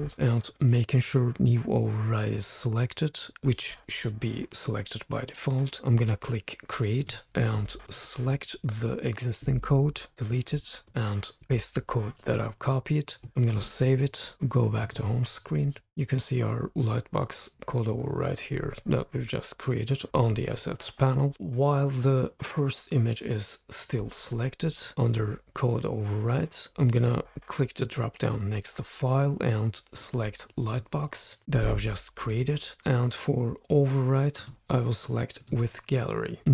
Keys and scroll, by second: 0.0-0.5 typing, 9.4 super+a, 10.0 super+a, 10.2 BackSpace, 11.3 super+v, 13.5 super+s.